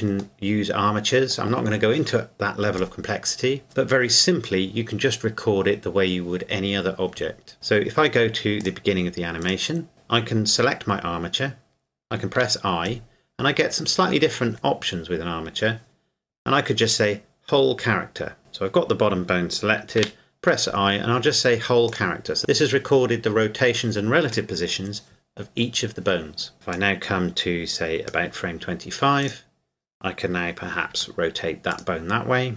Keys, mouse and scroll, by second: 8.6 click, 9.4 right click, 12.3 i, 18.4 right click, 20.0 i, 21.9 click, 26.8 click, 29.2 right click, 30.9 r, 31.7 click.